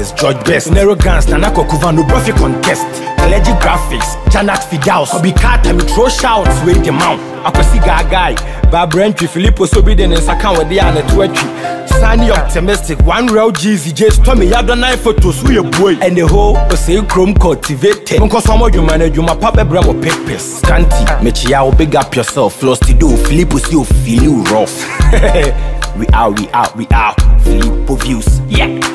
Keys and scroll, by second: 2.6 Down, 3.7 Up.